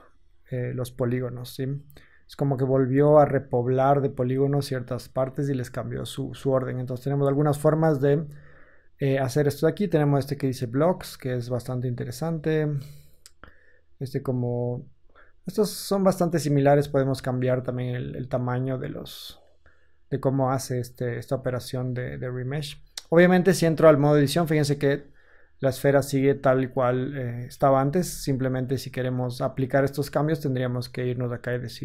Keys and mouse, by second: 9.9-12.8 middle drag, 12.8-15.1 drag, 15.1-16.8 middle drag, 16.8-31.8 drag, 24.1 Tab, 27.8 Tab.